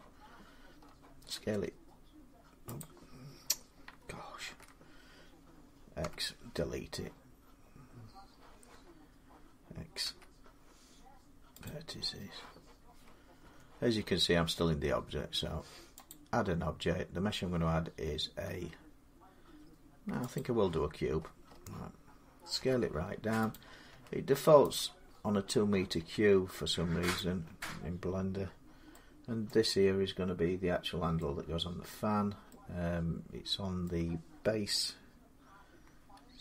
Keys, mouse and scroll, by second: 0.0-1.0 scroll, 1.0 s, 2.6 click, 4.2 ctrl+z, 4.6 middle click, 5.8 x, 9.8 x, 11.4 click, 13.2 Tab, 15.9 click, 20.1 click, 20.6-22.4 scroll, 22.4 scroll, 22.4 s, 23.3 click, 23.7 s, 24.5 click, 24.9-25.8 scroll, 25.8 s, 26.9 click, 26.9 scroll up 10, 29.3 middle click, 31.7 middle click, 33.6 middle click.